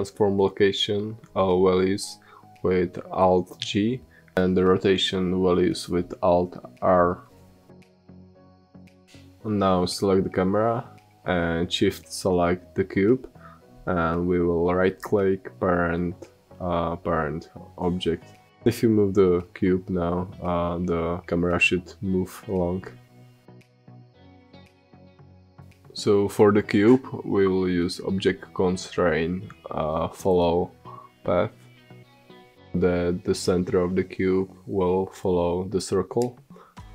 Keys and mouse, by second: 2.5-3.5 drag, 4.3-6.3 drag, 7.0-11.8 middle drag, 11.8-13.8 drag, 14.5-16.5 right drag, 19.3 click, 21.7 g, 25.3 ctrl+z, 25.8-29.0 middle drag, 29.8-34.6 drag, 36.4-36.9 middle drag.